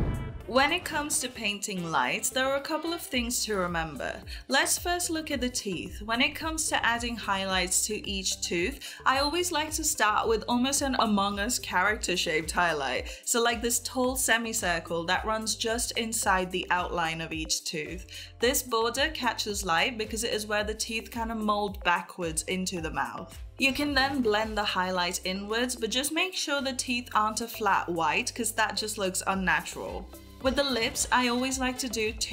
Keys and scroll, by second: 1.1 ], 12.4 [, 13.6 ], 15.1 [, 17.5 [, 19.0 [, 21.6 j, 24.8 ], 25.6 ctrl+s, 27.8 [, 30.0-32.3 typing.